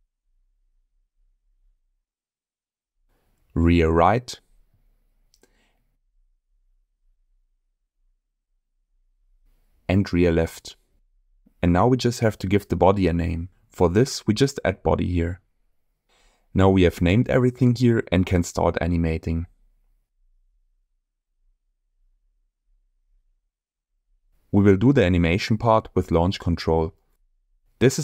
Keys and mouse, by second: 0.2-0.7 middle drag, 1.4-1.7 middle drag, 2.4 click, 3.7-5.9 ctrl+drag, 4.5 BackSpace, 5.5 shift+r, 6.7-7.3 middle drag, 7.9-11.0 drag, 9.7 BackSpace, 12.0 click, 12.2-16.5 drag, 13.8 BackSpace, 14.0 BackSpace, 18.4 click, 20.0 click.